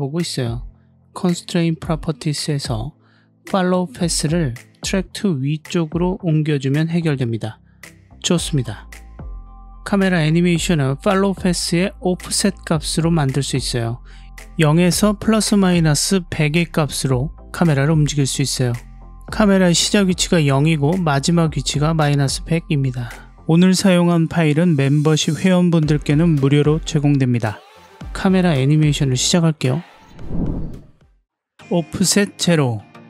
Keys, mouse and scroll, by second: 2.4 click, 4.3-5.6 drag, 15.0-18.0 drag, 28.3-30.4 drag, 30.9-33.0 drag.